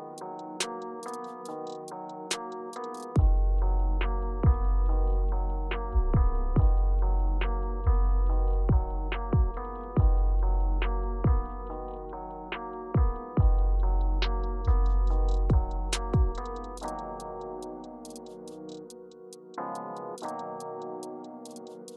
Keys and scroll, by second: 14.0-15.3 typing, 17.3 space, 20.8 r.